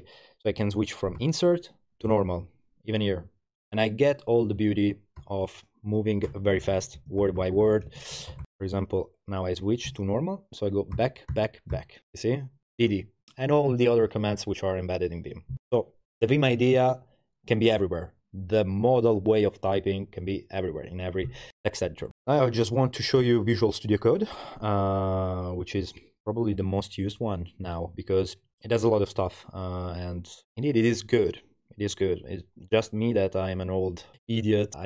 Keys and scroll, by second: 2.1 shift+Escape, 6.1-8.9 typing, 9.9 Escape, 11.0-13.3 typing, 23.2 Return.